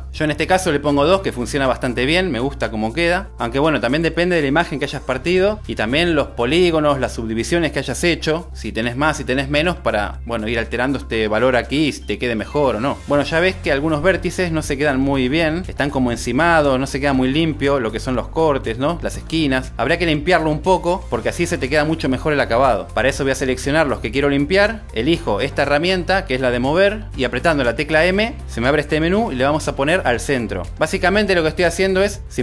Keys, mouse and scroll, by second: 0.5 click, 1.3 click, 10.9 click, 23.9-25.0 drag, 28.7 m.